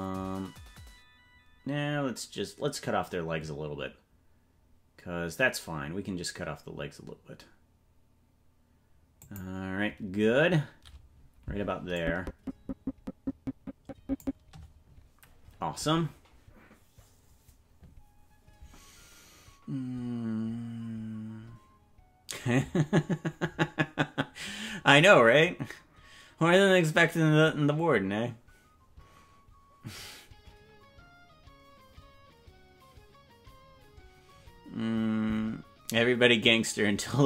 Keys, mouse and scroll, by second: 12.1-14.6 drag.